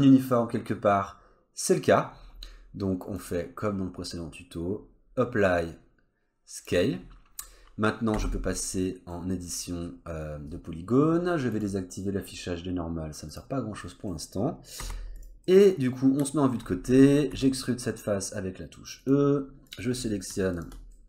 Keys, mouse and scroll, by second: 3.2 click, 7.4-8.1 scroll up 1, 8.1 Tab, 8.7 middle click, 10.0-10.5 scroll up 1, 11.5 click, 13.8 middle click, 14.8 3, 15.2 click, 15.4 middle click, 16.8-17.3 scroll up 1, 17.3 e, 19.7 click, 20.0 middle click, 20.5 shift+click, 20.8 scroll down 1, 20.9 middle click.